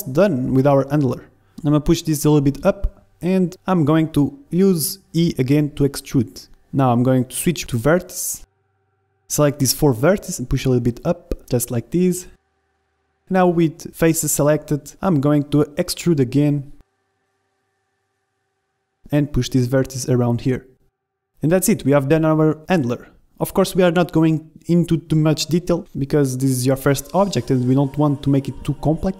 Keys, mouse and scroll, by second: 0.1-2.1 middle drag, 1.9 g, 3.4-6.4 middle drag, 3.5 e, 6.9-8.6 middle drag, 7.2 ctrl+Tab, 8.3 a, 8.6 b, 9.4 click, 10.0 ctrl+z, 10.0 b, 11.1-12.4 drag, 13.7 a, 13.9 click, 13.9 b, 14.2 middle click, 14.4 ctrl+Tab, 14.8-15.9 drag, 15.3 e, 17.9 ctrl+Tab, 18.8 a, 19.1 b, 20.0-21.7 drag, 23.9-25.8 drag, 25.2 middle click, 25.8 middle click, 25.9 Tab, 27.3 z, 28.9-29.1 typing.